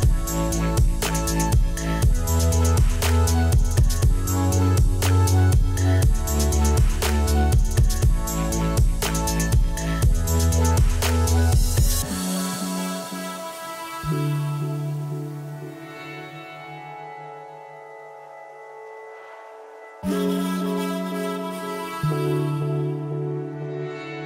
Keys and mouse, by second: 2.5 Return, 5.1 click, 7.3 KP_0, 7.5 Return, 8.4 click, 8.6 KP_Decimal, 8.8 Return, 9.5 click, 10.6 Return, 13.6 click, 15.6 click, 16.9 ctrl+click, 17.2 right click, 18.1 click, 18.4 ctrl+shift+x, 18.7 click, 20.2 click, 21.5 x, 21.8 click, 22.4 ctrl+1, 22.4 click, 22.8 Escape, 22.9 click, 23.3 ctrl+shift+x, 23.7 click.